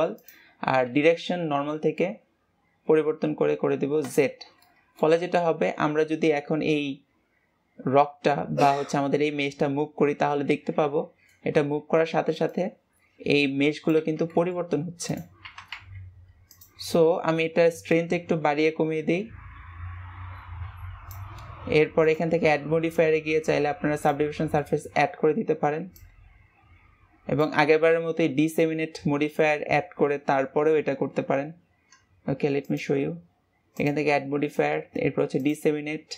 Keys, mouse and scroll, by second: 0.1-3.2 drag, 4.6 middle click, 5.2 g, 17.8-21.0 drag, 22.0-24.6 drag, 24.6-25.9 middle drag, 25.9-27.6 drag, 27.6-30.8 middle drag, 32.6-36.1 drag.